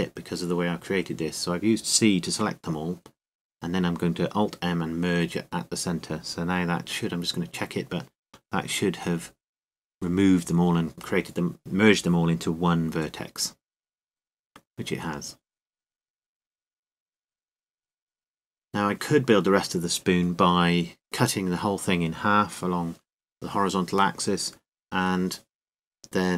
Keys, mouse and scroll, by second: 2.6-3.7 right drag, 3.7 alt+m, 8.2-11.5 middle drag, 11.5 n, 13.0-14.6 middle drag, 14.3 KP_Decimal, 15.1-16.9 middle drag, 18.6 KP_7, 19.6 click, 19.8 click.